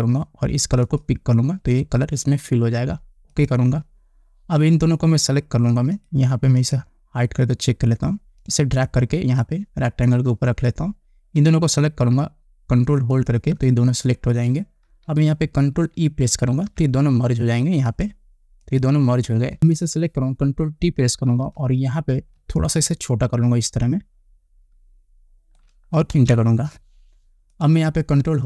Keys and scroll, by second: 17.0 ctrl+e, 21.6 ctrl+t, 26.6 Return.